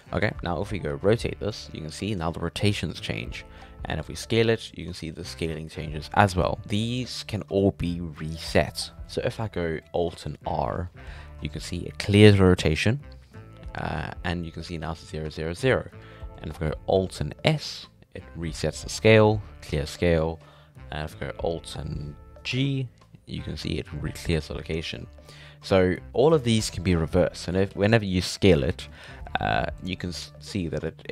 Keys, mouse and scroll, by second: 0.3 shift+middle click, 0.6-0.9 scroll up 1, 0.9 r, 4.0 s, 9.8 middle click, 10.5 alt+r, 16.0-17.4 scroll down 2, 16.1 shift+middle click, 17.4 alt+s, 22.5 alt+g, 25.2-27.7 shift+middle drag, 27.7 s, 28.6 middle click, 29.0 s, 30.0-31.1 middle drag.